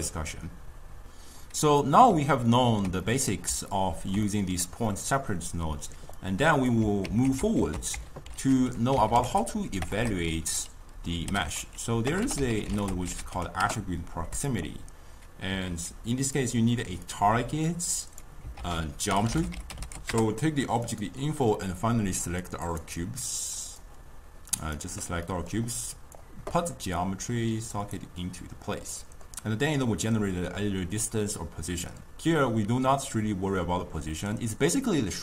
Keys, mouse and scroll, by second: 2.3-6.2 ctrl+middle drag, 6.2-7.1 drag, 7.1 ctrl+x, 7.6 ctrl+a, 9.3 t, 10.0 BackSpace, 15.7 ctrl+a, 17.1-18.6 drag, 18.6 ctrl+a, 22.3 click, 22.7 click, 23.7 click, 25.3-25.8 middle drag, 25.8-29.0 drag, 29.0-29.7 middle drag, 29.7 click.